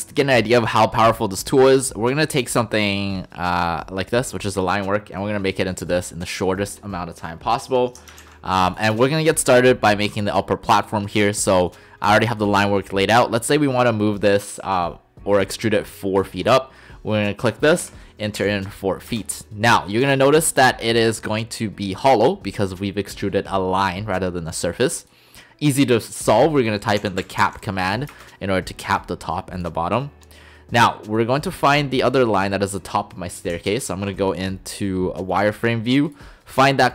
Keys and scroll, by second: 17.8 4, 18.4 ', 19.1 Return, 27.0-27.4 typing, 28.1 Return.